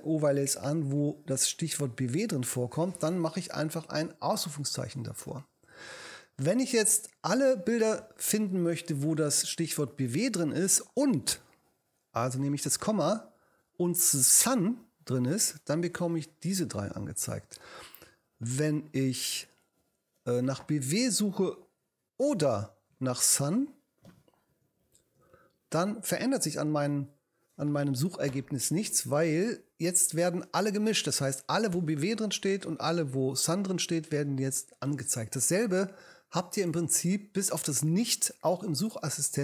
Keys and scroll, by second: 1.8 shift+i, 5.8 BackSpace, 6.9 Right, 12.1 ,, 14.1-15.7 typing, 18.3 BackSpace, 23.5-25.6 typing.